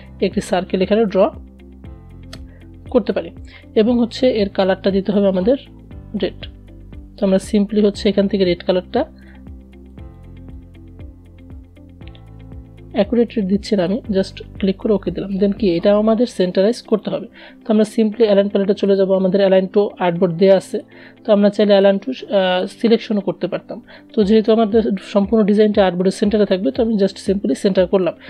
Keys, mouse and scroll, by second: 6.3-14.4 drag, 15.2 click, 23.8 click.